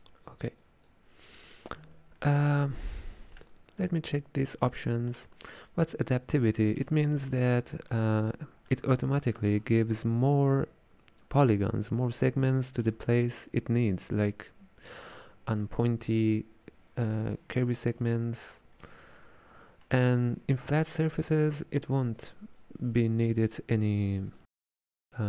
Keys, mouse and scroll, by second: 0.6 click, 2.2-3.9 middle drag, 3.9 click, 4.9-12.1 middle drag, 12.3-15.4 ctrl+middle drag, 19.3-22.4 ctrl+middle drag.